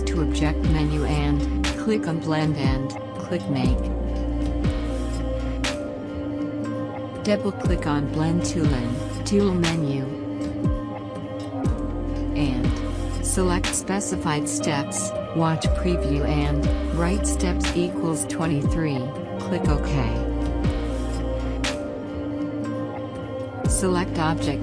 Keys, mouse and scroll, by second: 0.2-2.7 drag, 5.4 click, 10.8 click, 18.1 typing, 19.6 click.